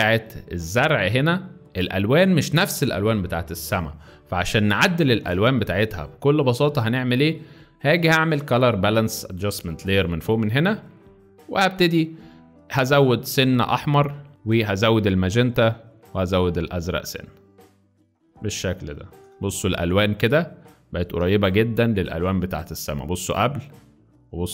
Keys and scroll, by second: 0.1 space, 10.9 space, 18.3 z, 19.3 space, 20.3 z.